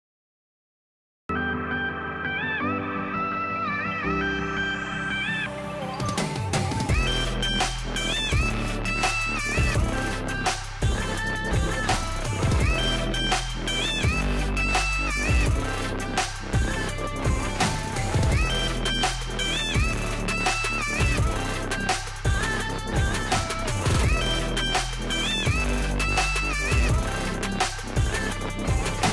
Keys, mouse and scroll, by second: 0.7 click, 4.1 click, 10.0 click, 19.3 click, 20.2 click, 28.2 click.